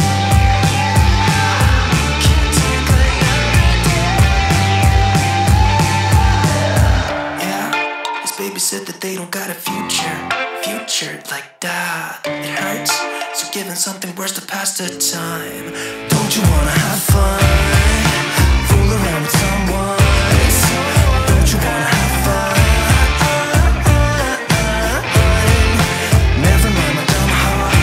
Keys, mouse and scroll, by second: 10.8 click, 11.1-15.1 drag, 19.3-27.8 drag.